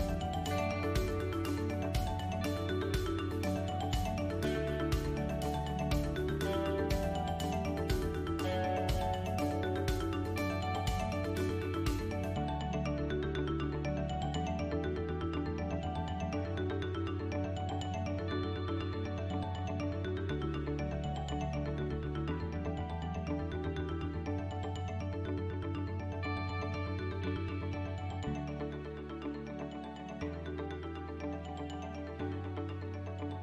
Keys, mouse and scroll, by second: 1.3 shift+space, 2.7 click, 3.9 click, 6.1 KP_1, 8.1 Tab, 9.2 a, 9.3 s, 10.4 g, 14.0 Tab, 14.6-14.9 scroll up 5, 15.1 shift+middle click, 16.4 Tab, 16.7 middle click, 19.0 KP_1, 21.6 s, 24.3 s, 27.6 middle click, 28.9 click, 29.7 3, 30.1 click, 30.7 KP_1, 31.9 click.